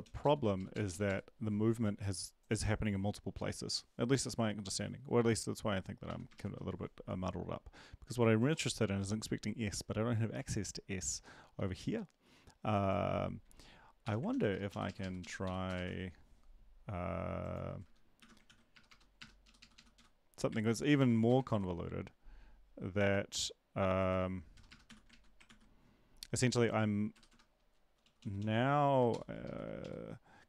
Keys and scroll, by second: 0.7 Down, 6.3 Right, 6.3 ctrl+shift+Left, 14.0 shift+Home, 14.3 ctrl+x, 14.7 Up, 14.8 Up, 15.0 Up, 15.4 Up, 15.4 End, 15.6 Return, 15.8 ctrl+v, 18.2 shift+Home, 18.4 ctrl+x, 18.7 BackSpace, 18.9 BackSpace, 19.2 BackSpace, 19.4 Up, 19.6 Up, 19.7 Up, 20.0 Delete, 20.0 End, 20.6 ctrl+z, 21.0 End, 21.4 Return, 24.7 BackSpace, 24.8 s, 25.1 ctrl+Right, 25.4 ctrl+s, 27.3 BackSpace, 28.0 Down, 29.1 shift+Up, 29.4 shift+Left, 29.8 Up.